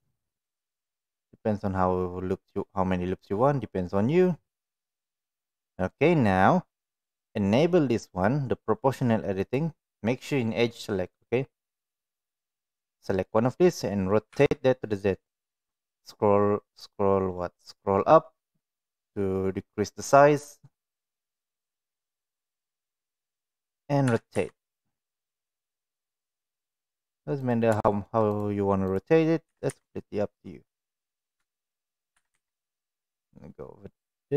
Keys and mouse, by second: 5.3 click, 9.3 click, 12.1 click, 14.3 r, 24.1 r, 27.8 shift+middle click, 28.3 click, 29.5 r, 32.1 r.